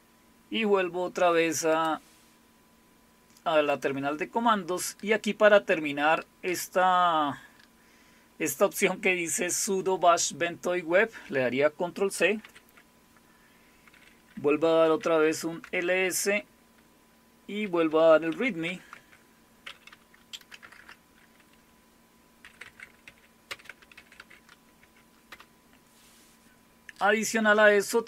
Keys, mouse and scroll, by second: 1.7 click, 3.7 click, 12.4 ctrl+c, 14.6-15.5 typing, 15.6 Return, 17.9-18.6 typing, 18.9 Tab, 20.4 BackSpace, 20.6 BackSpace, 20.8 BackSpace, 22.2-24.7 typing, 24.8 Tab, 25.3 Return.